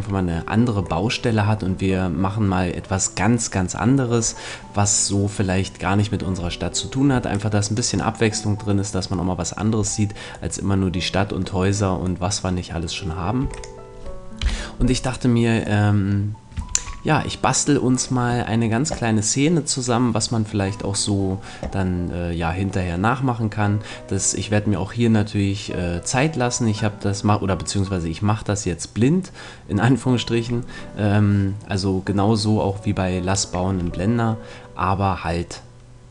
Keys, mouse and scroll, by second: 1.0-5.8 middle drag, 7.4-8.4 drag, 8.2-13.4 middle drag, 13.4 x, 14.4 KP_1, 15.8 middle click, 16.6 shift+a.